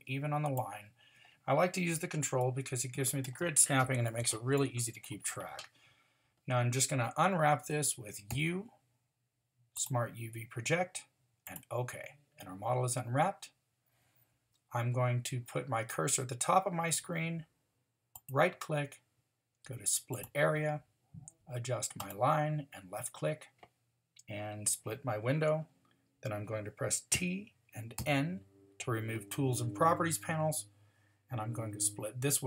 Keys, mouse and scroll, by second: 8.3 u, 18.1-20.2 drag, 27.1 t, 28.0 n.